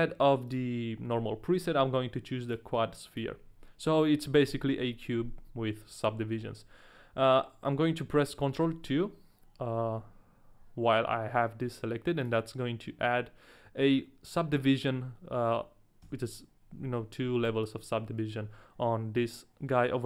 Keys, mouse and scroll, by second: 0.5 click, 3.1 click, 4.5 KP_1, 8.7 ctrl+2, 12.2 click, 16.0 a, 16.7 a, 17.4 a.